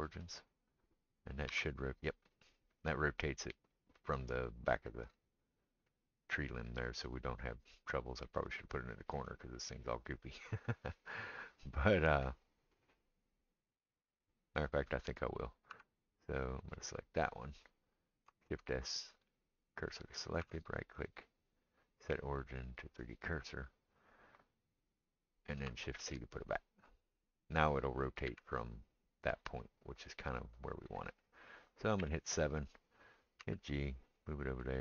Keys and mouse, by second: 1.5 r, 15.7 Tab, 16.5-21.1 middle drag, 18.5 shift+s, 20.4 Tab, 21.1-31.0 right drag, 26.0 shift+c, 27.0-27.3 drag, 27.0-27.3 middle drag, 28.3 r, 31.0-34.8 middle drag, 32.0 KP_7, 33.4 g.